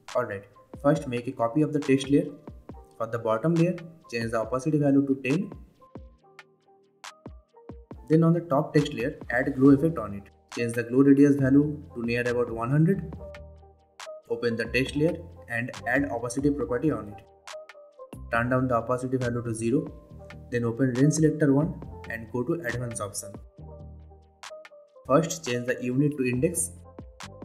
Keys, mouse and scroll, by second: 0.8 ctrl+d, 1.5 click, 2.8 t, 4.1 click, 6.4 Return, 7.2-21.2 drag, 10.9-13.1 drag, 20.0-20.4 click, 23.4 scroll down 2, 26.7 click.